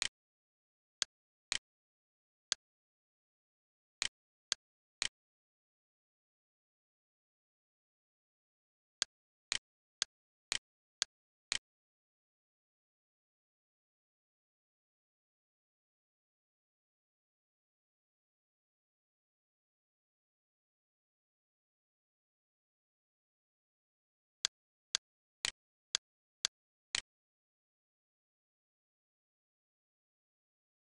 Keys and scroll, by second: 0.3 Escape, 1.5 x, 5.3 d, 11.8-13.8 typing, 15.5 4, 15.9 3, 17.9 -, 18.1 9, 19.9 Return, 21.3 ctrl+z, 21.7 c, 25.3 d, 27.4-28.5 typing.